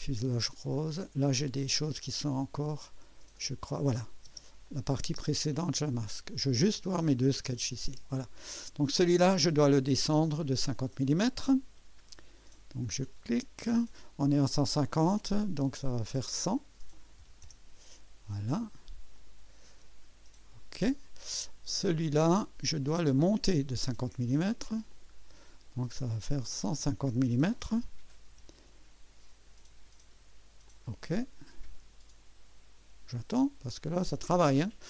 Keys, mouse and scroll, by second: 0.7 click, 2.2 scroll down 1, 3.4 click, 3.9 click, 4.3 space, 4.7 click, 5.1 space, 5.6 click, 6.9 click, 7.4 space, 7.9 space, 12.3 click, 12.9 click, 16.0 click, 17.2 KP_1, 17.6 KP_0, 19.1 click, 22.7 click, 24.3 click, 24.9 click, 26.4 click, 27.6-28.9 typing, 30.6 click.